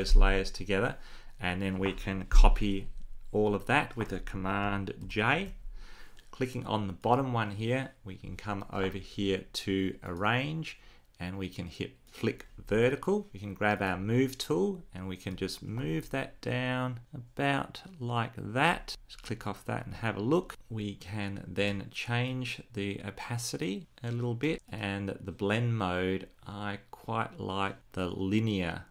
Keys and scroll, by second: 4.7 super+j.